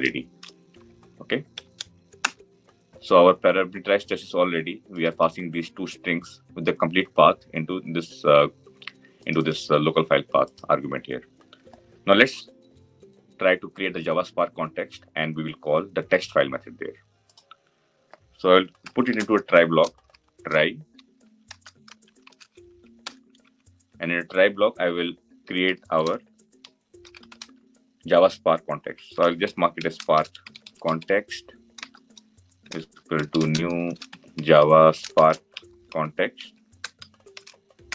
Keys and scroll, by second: 37.8 Return.